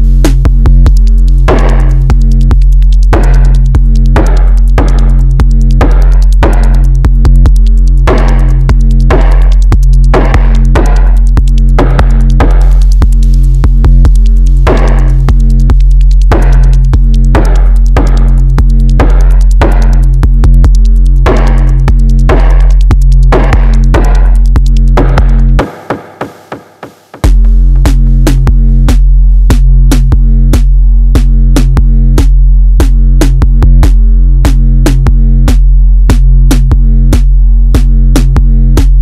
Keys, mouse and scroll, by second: 0.2 click, 0.8 click, 2.8 scroll down 2, 3.0 KP_1, 3.8 shift+scroll down 1, 3.9-5.7 shift+middle drag, 5.7 scroll up 1, 5.8 middle click, 6.7 scroll up 1, 7.5 alt+z, 8.5 click, 10.2 shift+click, 11.4 click, 13.5 KP_1, 14.3-15.7 shift+middle drag, 15.7 click, 18.0-18.4 shift+middle drag, 18.4-18.8 scroll up 1, 18.8 alt+z, 20.2 middle click, 20.9-21.2 scroll down 3, 21.2 middle click, 22.0-22.8 scroll up 1, 22.8 click, 24.0 shift+click, 24.9 click, 26.6 ctrl+click, 28.2 click, 30.3-30.6 scroll down 1, 30.6 KP_1, 31.2-31.6 scroll down 1, 31.6 Tab, 32.0 scroll down 1, 32.1-34.5 middle drag, 34.5-35.3 scroll down 1, 35.3 shift+middle click, 36.1 KP_1, 36.3 click.